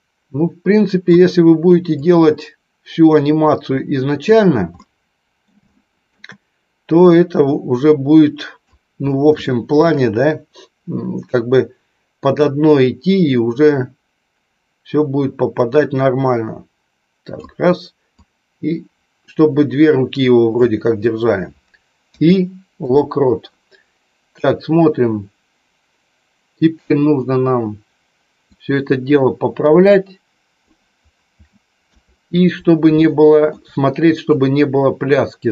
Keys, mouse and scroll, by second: 2.2-4.3 drag, 4.7 middle click, 5.7 shift+middle click, 7.0-8.8 drag, 9.4 shift+middle click, 12.3-17.4 drag, 18.3-20.7 drag, 22.1 i, 24.6-27.1 drag, 28.7-30.8 drag, 31.8 KP_3, 32.9 shift+middle click, 34.2-35.5 drag.